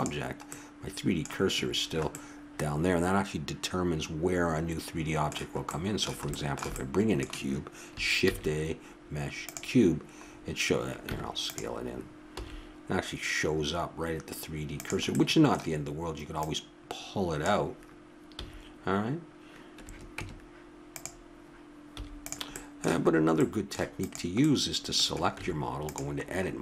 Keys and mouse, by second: 0.8-4.1 middle drag, 5.7-8.6 middle drag, 8.2 shift+a, 10.3 middle click, 11.1 Tab, 12.3 s, 16.3 click, 17.4 click, 18.4 x, 20.2 Tab, 21.9 x, 24.0-25.2 drag, 25.3 Tab.